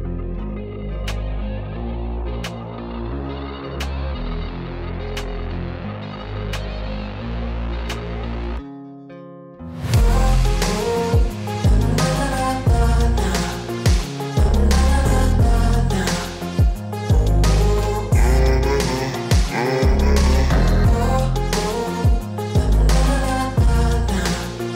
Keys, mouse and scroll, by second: 1.2-1.5 ], 2.1 space, 2.2 click, 2.3 space, 14.2-15.4 typing, 14.3 click, 15.1 click, 15.3 click, 15.8 click, 15.8 click, 18.2 click, 18.6 Down, 18.8 Return, 19.3 click, 20.3 z, 20.5 click, 21.6 click, 22.9 click, 23.7 click.